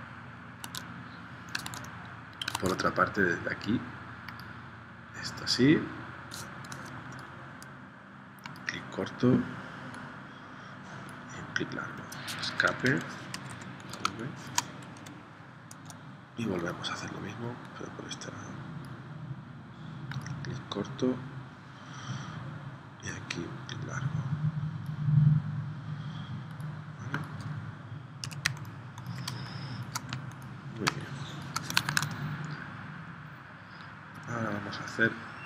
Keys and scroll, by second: 0.6 super+Tab, 1.7 super+Tab, 2.6 super+Tab, 12.5 Escape, 13.3 v, 14.1 space, 15.0 p, 28.4 z, 29.3 space, 31.0 space, 32.0 super+Tab.